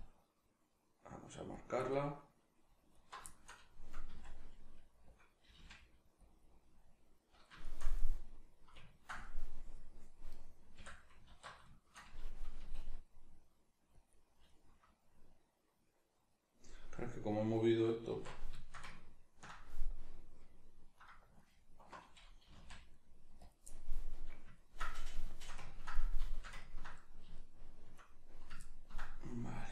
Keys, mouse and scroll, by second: 1.6 click, 1.9-2.9 middle drag, 2.9 alt+right click, 3.3 shift+middle click, 4.1 s, 4.9 click, 5.5 g, 6.3 click, 6.4-10.3 middle drag, 10.3 right click, 10.7 l, 11.3 alt+q, 11.7 shift+middle click, 12.6 g, 14.1 click, 14.5-18.1 middle drag, 18.1 alt+q, 18.6-20.9 ctrl+shift+middle drag, 20.9 right click, 21.4 alt+right click, 22.4 g, 23.4 click, 23.6-29.7 middle drag.